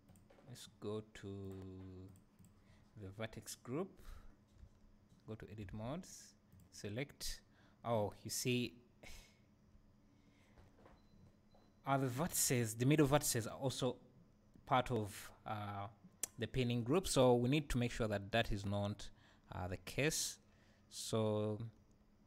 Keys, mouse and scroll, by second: 0.1-4.4 drag, 4.6 Tab, 5.7 alt+a, 6.5-22.2 drag, 8.6 `.